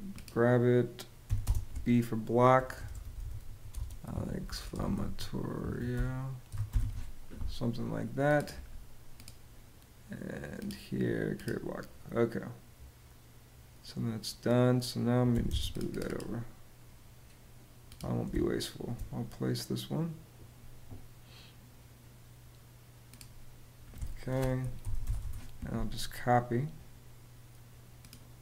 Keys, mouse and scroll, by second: 0.9-7.0 typing, 15.0 m, 15.2 space, 18.0 space, 24.3-25.2 typing.